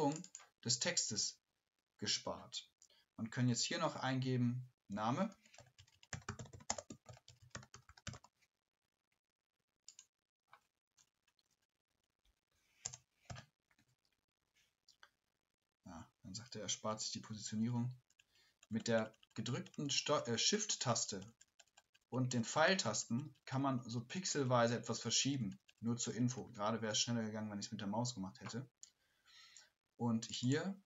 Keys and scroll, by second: 3.5 ctrl+a, 4.9 ctrl+a, 5.1-8.7 typing, 17.3 typing, 17.6 shift+Left.